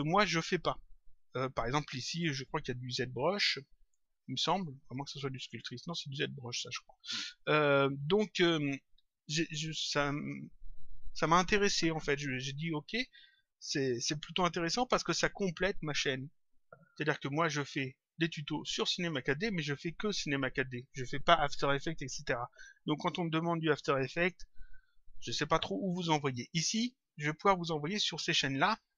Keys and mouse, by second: 17.6 click, 27.1 click.